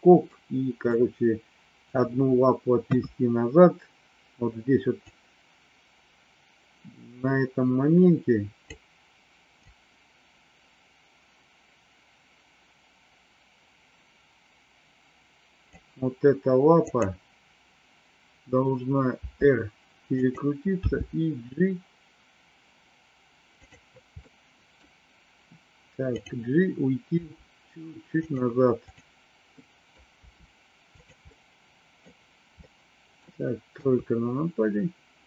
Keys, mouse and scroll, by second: 0.2 middle click, 2.8 KP_3, 5.1-8.7 drag, 9.6-15.7 drag, 19.2 r, 20.7 g, 24.2 middle click, 27.2 r, 28.9 click, 29.6 middle click, 31.2 middle click, 32.5 middle click, 33.8 KP_3.